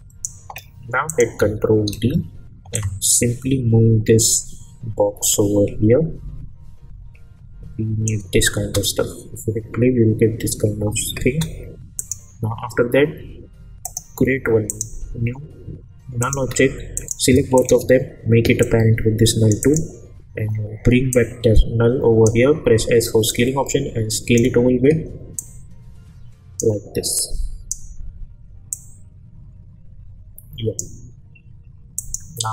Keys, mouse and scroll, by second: 1.9 ctrl+d, 2.7-8.3 drag, 4.1 shift+-, 4.1 shift+Num_Lock, 8.6 space, 11.2 space, 12.0 click, 13.8 right click, 14.7 click, 18.9-19.5 click, 21.4-22.3 click, 22.6 s, 23.3-24.5 drag.